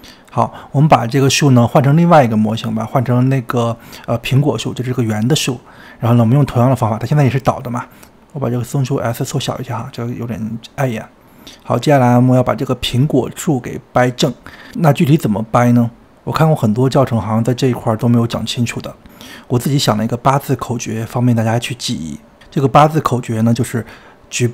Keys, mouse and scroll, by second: 1.4 click, 4.6-6.3 drag, 6.9-7.6 scroll down 5, 8.2 click, 9.1 s, 10.6-11.2 scroll down 4, 11.2-12.3 shift+middle drag, 12.3-13.0 scroll down 3, 13.0-16.1 shift+middle drag, 16.1 click, 16.8-18.6 scroll up 1, 18.6-20.1 scroll up 1, 20.1 scroll up 1.